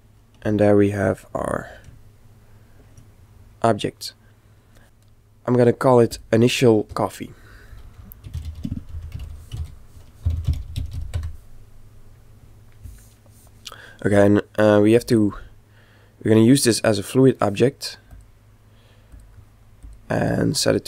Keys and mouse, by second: 1.0 click, 1.4-5.2 middle drag, 5.6 click, 7.9 click, 14.4-18.1 middle drag, 18.1-20.8 ctrl+drag.